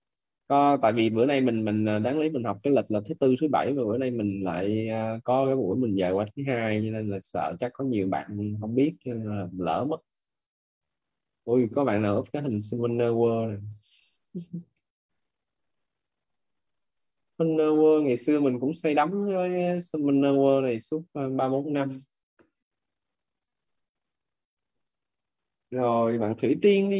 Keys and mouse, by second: 11.6 click, 14.6 click, 23.5 click, 26.4 click.